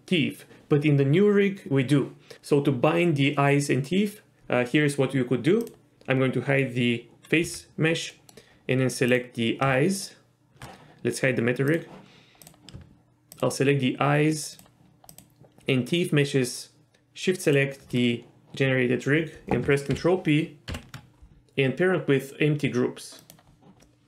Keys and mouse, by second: 5.6 click, 7.4 h, 8.1 middle click, 11.7 click, 12.4 click, 13.3 shift+click, 15.1 shift+click, 20.7 ctrl+p, 23.8 middle click.